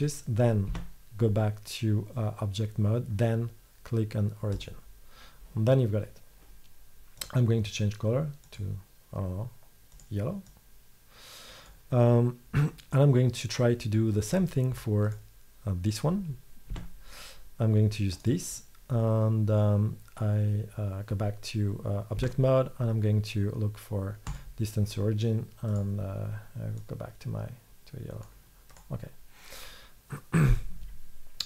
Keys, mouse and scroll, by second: 0.0-4.0 middle drag, 0.7 Tab, 7.0 middle click, 15.1-16.8 right drag, 16.8 Tab, 18.2-20.1 drag, 22.2 Tab, 28.0 middle click.